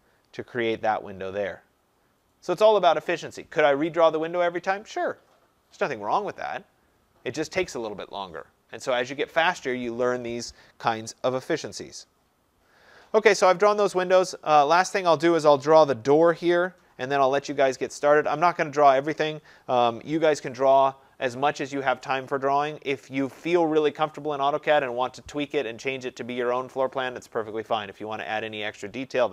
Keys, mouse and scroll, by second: 0.0 click, 12.3 scroll, 12.3-14.0 scroll down 4, 14.0-17.5 scroll up 3, 18.4-19.2 scroll down 3, 23.5 scroll.